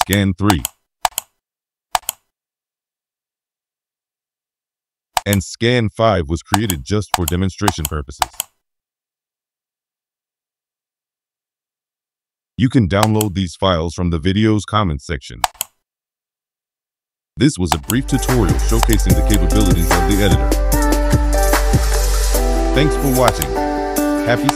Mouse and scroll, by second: 0.0 click, 0.4 click, 1.0 click, 1.9 click, 5.1 click, 6.5 click, 7.1 click, 7.6 click, 8.1 click, 13.0 click, 15.4 click, 17.7 click, 18.8 click, 19.2 click, 23.2 click.